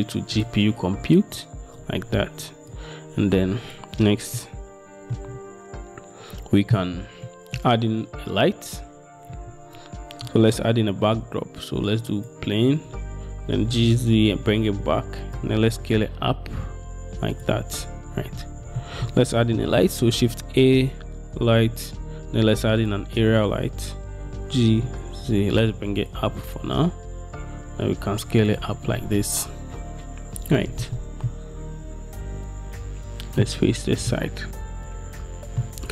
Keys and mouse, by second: 2.8 click, 3.0 middle click, 4.5 shift+middle click, 7.4-7.7 middle drag, 10.5 shift+a, 14.0 g, 14.0 z, 15.8 s, 18.9 middle click, 19.5 shift+a, 24.3 g, 25.0 z, 26.5 s, 31.4-34.3 middle drag.